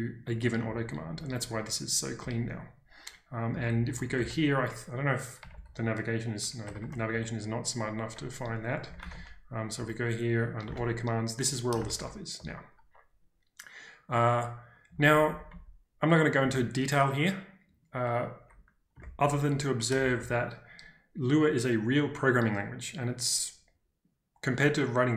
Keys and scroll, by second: 1.0-2.3 typing, 3.4-4.1 typing, 6.6 Escape, 6.8 Escape, 7.1 -, 8.1-11.2 typing, 11.9 ctrl+d, 12.3 ctrl+d, 14.8-16.3 typing, 19.2 ctrl+u, 20.0 ctrl+d, 20.1 ctrl+d.